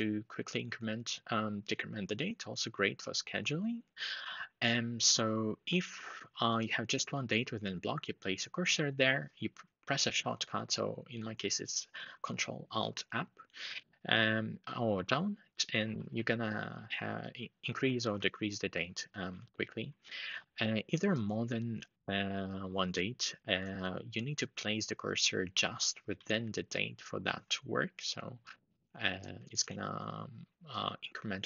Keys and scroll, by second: 13.5 ctrl+alt+Page_Up, 14.7 ctrl+alt+Page_Down, 15.5 ctrl+alt+Page_Up, 15.7 ctrl+alt+Up, 17.4 ctrl+alt+Page_Down, 17.6 ctrl+alt+Page_Down, 19.0 ctrl+alt+Page_Up, 25.9 ctrl+alt+Page_Up, 26.5 ctrl+alt+Down, 29.1 ctrl+alt+Page_Up, 29.3 ctrl+alt+Page_Up.